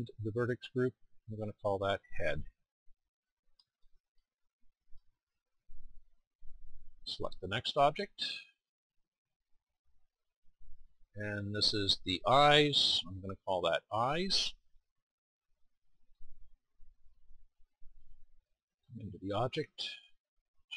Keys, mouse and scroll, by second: 9.9-13.7 middle drag, 16.1-19.1 middle drag.